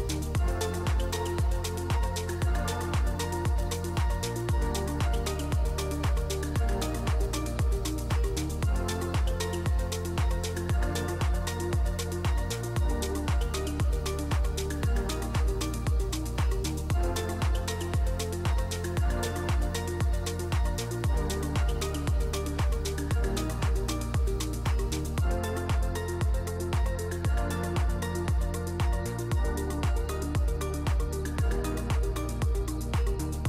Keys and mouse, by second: 1.7 Tab, 2.9 click, 3.6 click, 4.6 shift+drag, 5.9 click, 6.7 click, 7.2-8.0 drag, 8.3 click, 8.7 drag, 9.3 click, 9.6 click, 10.5 middle click, 10.7 shift+middle click, 11.2 middle click, 12.8-13.9 shift+drag, 14.1 Tab, 14.4 3, 14.8 click, 15.0 middle click, 15.5 shift+click, 15.7 middle click, 16.6 i, 17.9 click, 18.4 s, 20.7 Tab, 21.9 click, 22.4 click, 22.9 click, 23.5-24.1 right drag, 25.8 click, 27.0-27.7 middle drag, 28.5-29.5 shift+drag, 29.8 middle drag, 30.4 Tab, 30.8 click, 31.0 3, 31.2 click, 31.6 shift+s, 32.4 Tab, 32.7 shift+a.